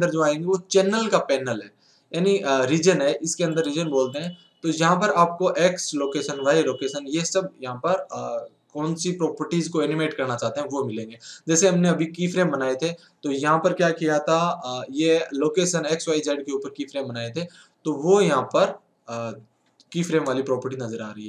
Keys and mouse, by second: 14.4 n, 17.9 n, 20.2 middle click.